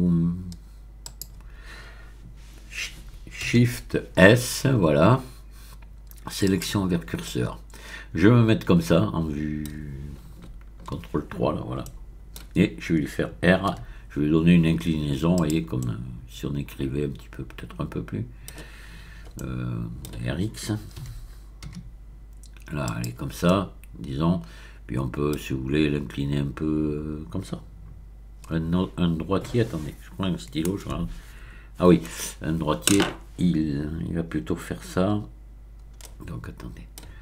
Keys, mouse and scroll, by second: 1.0 click, 3.5 shift+s, 6.4 click, 7.2-10.4 middle drag, 10.4 ctrl+KP_3, 10.4 ctrl+middle click, 11.8-12.9 shift+middle drag, 13.7 r, 15.3 click, 15.8-18.8 middle drag, 15.8-16.4 scroll up 1, 19.3 middle click, 19.3-20.0 scroll up 1, 20.0 scroll up 1, 21.0 r, 21.7 x, 22.8 click, 23.4-25.7 middle drag, 36.0-37.2 middle drag.